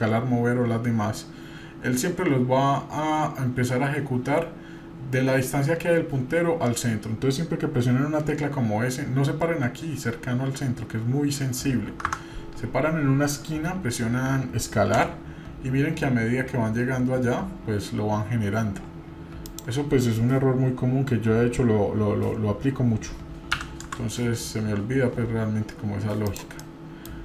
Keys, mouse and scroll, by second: 26.6 middle click.